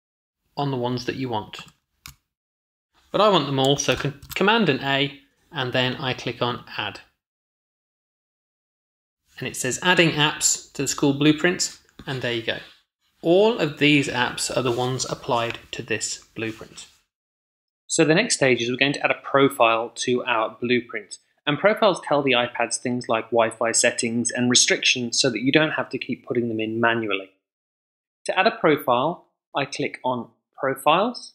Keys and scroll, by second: 3.4 super+a.